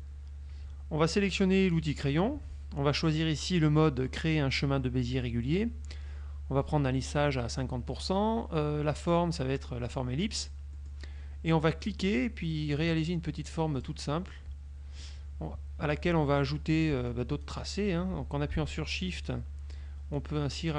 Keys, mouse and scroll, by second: 1.8 click, 9.1 click, 10.0 click, 10.8 middle click, 11.9 click, 14.4-15.4 middle drag, 17.2 shift+click, 19.4 shift+click, 20.3 shift+click.